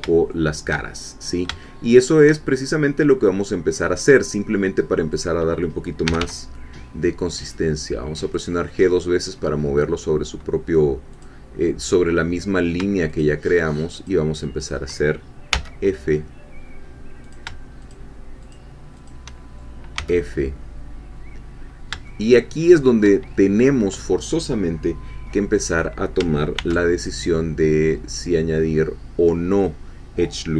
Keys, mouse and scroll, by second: 0.3 shift+click, 1.0 shift+scroll down 1, 1.6-2.7 shift+drag, 5.2 click, 6.1 g, 8.3 click, 8.8 scroll up 1, 11.2-12.8 drag, 13.1 shift+click, 14.1 shift+click, 15.5 f, 17.2 shift+click, 18.5 shift+click, 20.0 f, 21.6 scroll up 2, 22.1-23.1 shift+middle drag, 26.5 ctrl+r, 27.0 ctrl+click.